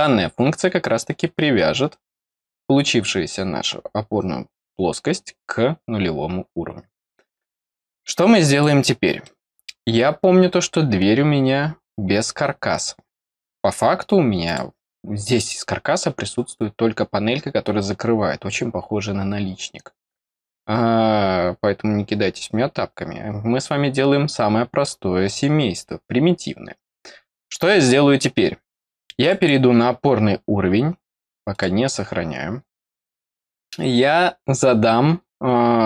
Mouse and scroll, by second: 1.6 scroll down 1, 7.7 scroll up 1, 8.5 click, 9.2 middle click, 14.4 click, 16.3 scroll up 1, 29.1 click, 29.3 click, 30.1-31.5 scroll down 1, 31.5 click.